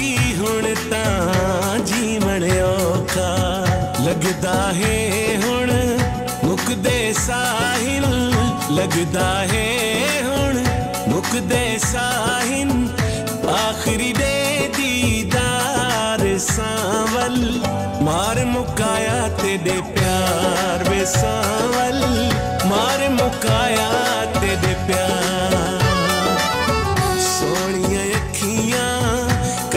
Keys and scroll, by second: 3.5 ctrl+a, 7.0-10.7 typing, 11.8 space, 12.5 6, 14.3 BackSpace, 15.3 5, 16.4 Return, 17.5 ctrl+v, 17.9 F4.